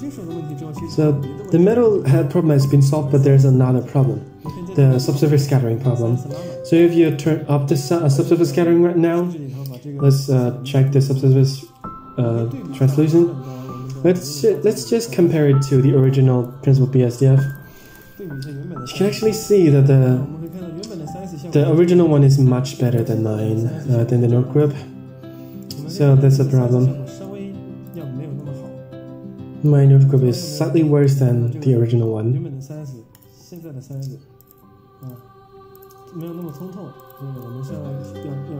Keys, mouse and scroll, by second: 0.0 middle click, 0.5 scroll up 4, 0.8 middle click, 1.5 middle drag, 2.7 click, 3.3-3.7 scroll up 1, 3.7 middle click, 4.2 scroll up 1, 5.2 scroll down 1, 5.2 scroll down 1, 6.0 click, 7.0 drag, 7.4 click, 8.2 n, 9.0 click, 10.0 click, 10.7 n, 11.3 shift+a, 15.9 click, 17.4 click, 18.0 ctrl+shift+click, 18.8 middle click, 19.6 scroll up 1, 19.7 scroll down 2, 20.4 click, 20.8 middle click, 23.0 ctrl+shift+click, 24.1 middle click, 25.1 scroll down 3, 25.6 middle click, 26.1 scroll up 2, 26.3-27.3 middle drag, 28.0 click, 28.4-28.8 middle drag, 28.9 middle click, 30.3 ctrl+shift+click, 30.9-31.5 middle drag, 33.1 ctrl+shift+click, 34.3 ctrl+shift+drag, 35.0 ctrl+shift+click, 35.6-36.1 ctrl+shift+drag, 36.3 ctrl+shift+drag, 36.9 ctrl+shift+drag, 37.9 middle drag.